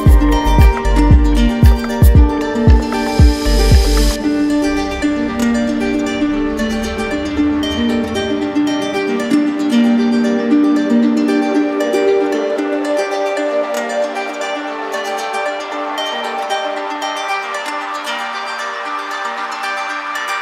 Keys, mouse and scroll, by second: 0.6 ctrl+w, 2.0 click, 3.2 click, 5.3 z, 6.6 click, 8.1 right click, 9.9 alt+right click, 11.7 alt+right click, 12.5 right click, 13.4 alt+right click, 14.5 right click, 15.8 right click, 18.3 ctrl+click, 20.0 ctrl+w.